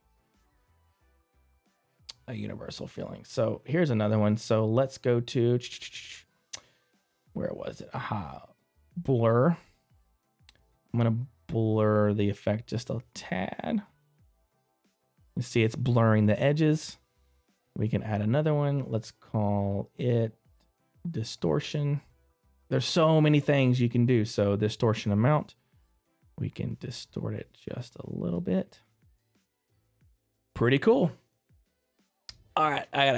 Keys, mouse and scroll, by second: 29.0 scroll down 1, 29.8 middle click.